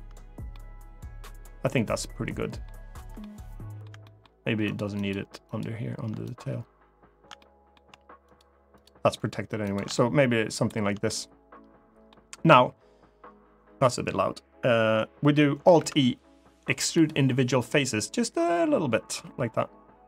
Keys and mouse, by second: 0.2-2.4 middle drag, 2.9 middle click, 3.8 shift+middle click, 4.4 shift+click, 4.7 shift+click, 5.3 shift+click, 7.1 middle click, 8.0 shift+click, 9.4 shift+click, 9.6 middle click, 10.8-11.8 middle drag, 15.5 alt+e.